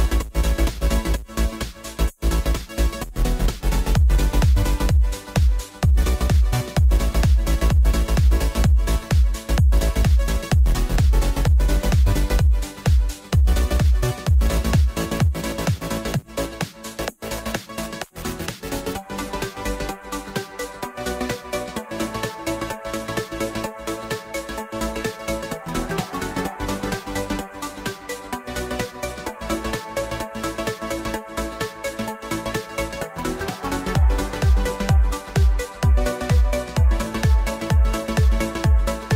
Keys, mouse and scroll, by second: 0.1-2.4 middle drag, 2.4 click, 4.0-4.5 right drag, 4.5-6.5 middle drag, 6.5 click, 8.2 shift+click, 8.6 shift+click, 9.5 ctrl+j, 10.3 scroll up 1, 10.5-14.5 middle drag, 14.5-15.5 drag, 15.5-16.2 scroll down 1, 16.2-16.9 scroll down 1, 16.9-17.6 scroll down 1, 17.6 Tab, 18.5 a, 19.6 u, 21.0 click, 23.2-23.8 scroll down 2, 23.8 scroll down 3, 24.0 shift+middle click, 24.8-25.8 scroll up 1, 25.8 shift+middle click, 26.7-28.6 scroll down 1, 28.6-29.1 scroll down 1, 29.1-30.0 scroll down 1, 30.0-31.1 scroll down 1, 31.1-32.9 scroll down 1, 32.9-33.9 scroll down 1, 33.9-36.2 scroll down 1, 36.2-37.5 scroll down 1, 37.5-39.1 right drag.